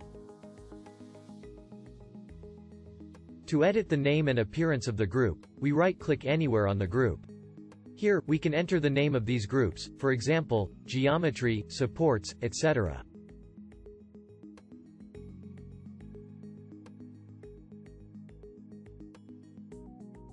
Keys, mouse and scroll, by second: 6.1-9.3 right drag.